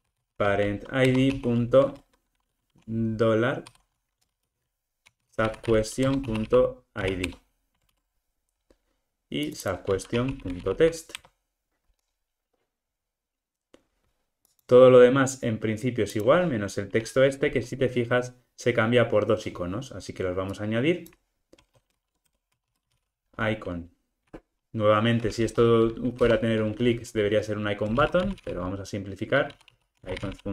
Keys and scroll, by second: 1.1 Return, 6.1 Return, 7.8 super+z, 11.2 Return, 26.3 Return.